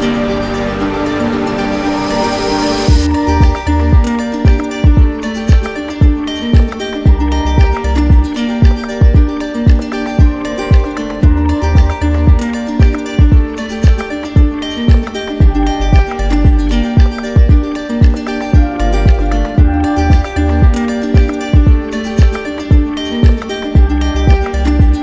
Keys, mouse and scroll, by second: 0.1 alt+click, 1.4 alt+click, 2.4 click, 3.6 right click, 4.7 right click, 5.5 alt+right click, 6.1 alt+click, 8.0 alt+click, 8.3 ctrl+z, 8.9 alt+click, 10.3 click, 11.6 click, 12.7 alt+click, 14.7 alt+click, 17.9 alt+click, 19.6 alt+right click, 20.3 right click, 20.9 alt+click, 22.1 z, 23.3 click.